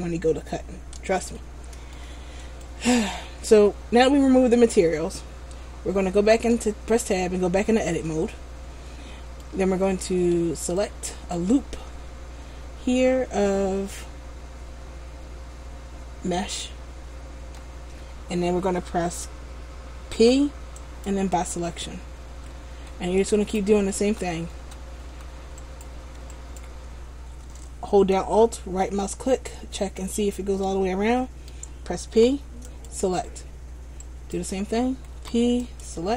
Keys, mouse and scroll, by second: 1.5 shift+middle click, 2.8 right click, 6.4 Tab, 7.4-9.6 scroll up 4, 8.2 shift+middle click, 9.9 scroll up 1, 11.0 alt+right click, 11.6 middle click, 20.2 p, 23.4 alt+right click, 24.2 a, 24.7 a, 25.8 right click, 26.5 alt+right click, 29.1 middle click, 32.3 p, 34.2 alt+right click, 35.3 p.